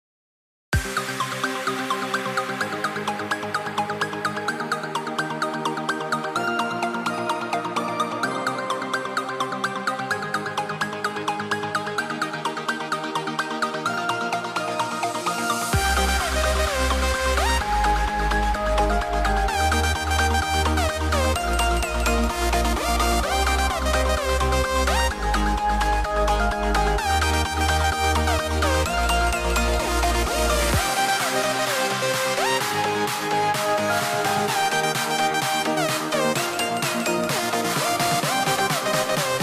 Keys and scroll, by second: 16.3 super+z, 22.8 shift+3, 23.1 shift+b, 23.8 shift+l, 24.2 shift+m.